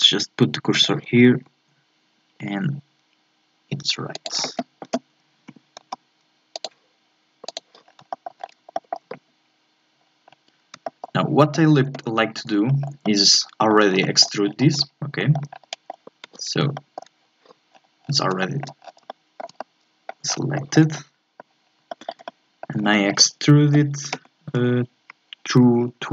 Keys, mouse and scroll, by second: 0.7 click, 1.3 s, 5.5 g, 7.5 click, 7.8 scroll down 3, 8.1 shift+middle click, 8.4 scroll up 1, 8.7-10.0 shift+middle drag, 10.0 scroll down 1, 10.2-10.8 scroll up 1, 10.8-14.4 shift+middle drag, 14.4 scroll down 4, 14.7-15.2 scroll up 2, 15.2 shift+middle click, 15.5 scroll up 1, 15.6 middle click, 16.6 Tab, 16.7 shift+middle click, 17.7-18.4 scroll down 7, 18.4 shift+middle click, 18.8 scroll down 1, 19.1-20.3 shift+middle drag, 20.3 scroll up 3, 20.6 shift+middle click, 20.9 scroll down 1, 21.0 middle click, 21.5-21.9 scroll up 2, 21.9-24.2 shift+middle drag, 24.2 e.